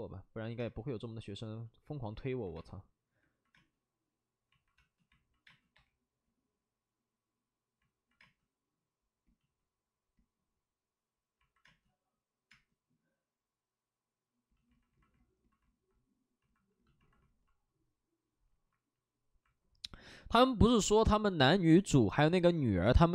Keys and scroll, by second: 0.5 space, 2.5 space, 3.5 space, 4.7 space, 5.4 space, 5.6 3, 8.1 space, 11.6 space, 12.4 space.